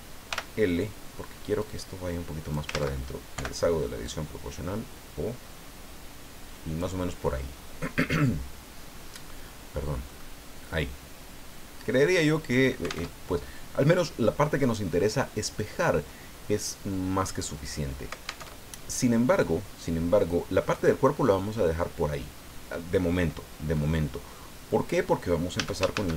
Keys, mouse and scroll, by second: 0.3 l, 1.6-2.7 drag, 2.7 ctrl+z, 4.0-7.0 drag, 10.1 middle click, 10.7-12.7 middle drag, 13.1 alt+Tab, 18.4 alt+Tab, 25.5 a.